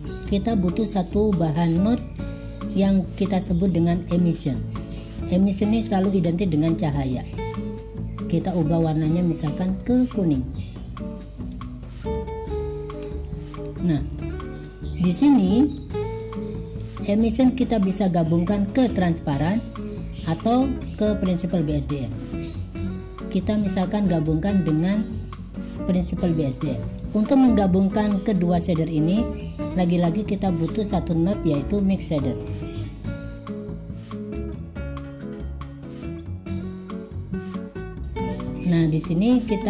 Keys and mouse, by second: 2.1-6.7 drag, 8.4 click, 13.2 click, 15.2-15.9 drag, 16.3 click, 17.5 click, 25.7-27.4 drag, 31.8-34.1 drag, 35.9 drag, 36.3 click.